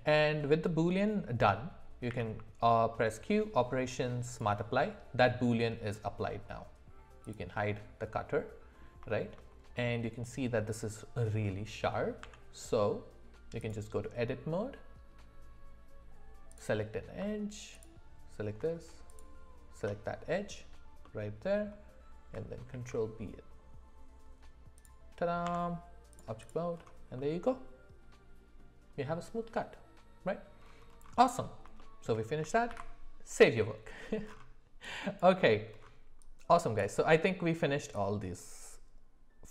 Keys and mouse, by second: 2.1 q, 7.2 click, 8.1 middle click, 9.1 shift+middle drag, 12.2 Tab, 16.5 click, 17.7 alt+click, 21.0 middle click, 22.7 ctrl+b, 25.4 Tab, 27.1-28.6 middle drag, 31.8 shift+middle click, 32.7 ctrl+s.